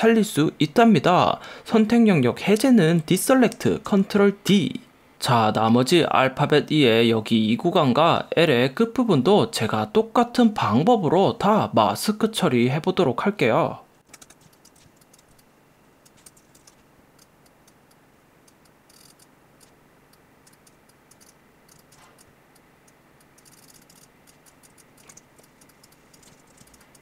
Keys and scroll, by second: 4.8 super+d, 14.1 super+=, 14.4 space, 14.7 b, 15.3 x, 16.3 super+=, 16.5 super+=, 16.7 p, 21.8 space, 22.1 super+z, 23.8 space, 25.1 b, 25.4 x, 26.4 super+-, 26.6 space.